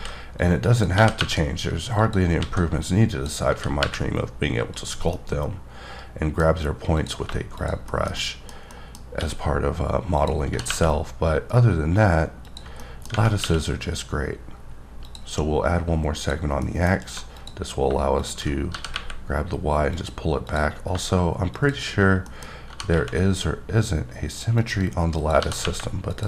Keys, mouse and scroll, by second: 0.7 click, 1.0 g, 1.2 y, 2.0 click, 2.4 alt+a, 2.8 click, 3.5 g, 3.8 y, 4.7 click, 5.2 middle click, 6.5 scroll up 1, 7.0 click, 7.6 click, 7.9 shift+middle click, 8.7-9.4 typing, 10.2 click, 10.5 g, 10.7 y, 12.5 click, 12.8 middle click, 13.4 q, 15.0 click, 16.2 click, 16.6 middle click, 16.9 scroll up 3, 17.4 click, 18.2 click, 18.7 g, 18.9 y, 19.9 click, 20.5 click, 22.0 scroll down 2, 22.3 middle click, 22.4 scroll, 22.5 scroll up 2, 22.7 g, 22.9 y, 24.6 click, 25.2 click, 25.4 g, 25.6 y, 26.1 click.